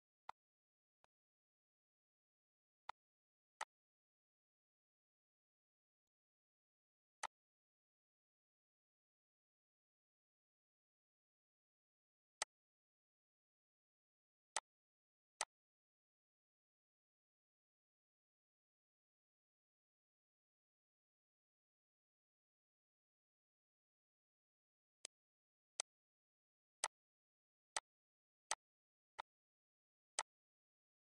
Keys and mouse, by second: 0.0 click, 0.6 click, 2.6 click, 3.3 click, 5.8 click, 7.0 click, 12.2 click, 14.3 click, 15.1 click, 24.8 click, 25.5 shift+click, 26.6 click, 27.5 click, 28.3 click, 29.0 click, 30.0 click.